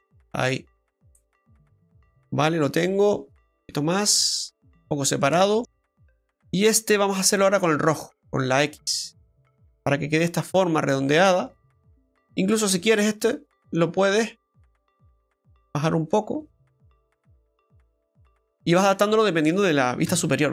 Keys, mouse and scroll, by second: 1.5 middle click, 4.1 click, 5.3 shift+middle click, 6.3 right click, 7.1 shift+right click, 8.1 click, 9.7 middle click, 12.6 right click, 13.1 shift+right click, 13.5 middle click, 14.7 click, 18.6 middle click, 20.0 middle click, 20.1 KP_7.